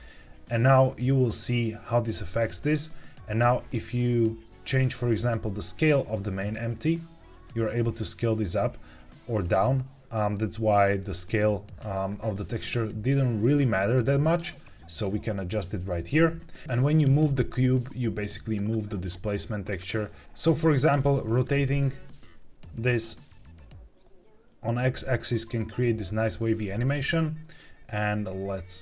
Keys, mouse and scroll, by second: 2.2 click, 3.3 s, 10.4 Escape, 13.4 s, 15.6 Escape, 17.9 g, 20.2 click, 20.8 click, 21.4 r, 21.6 x, 27.7 Escape.